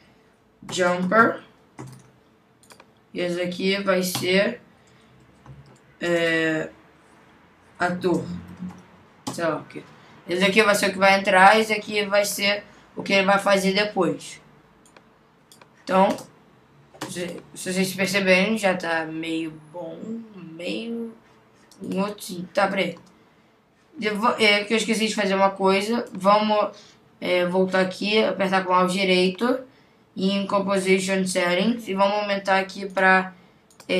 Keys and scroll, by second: 0.7 shift+j, 4.2 Return, 8.0 shift+a, 9.3 Return.